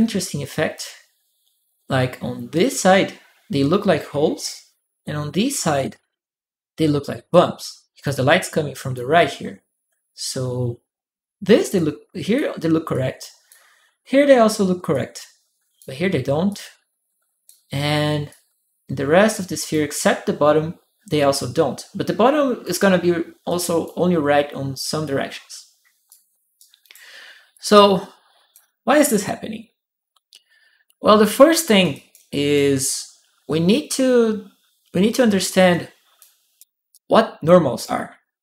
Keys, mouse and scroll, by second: 7.1 click, 8.5 click, 11.5 click, 12.7 click, 14.7 click, 16.3 click, 18.1-19.5 drag, 21.2-22.4 drag, 23.2 click, 24.8-25.9 drag, 26.3 right click, 27.3 click, 31.6 right click, 31.7 click, 35.0-36.3 right drag, 35.5 click, 36.7 click, 36.8 right click.